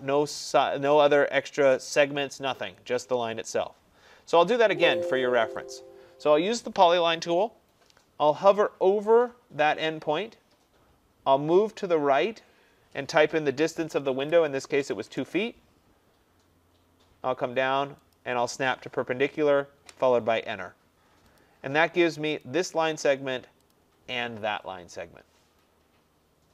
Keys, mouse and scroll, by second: 1.9 click, 4.8 Escape, 5.0 Escape, 5.8 click, 14.3-14.9 typing, 15.1 Return, 18.2 click, 19.8 Return, 21.4 click, 22.5 click.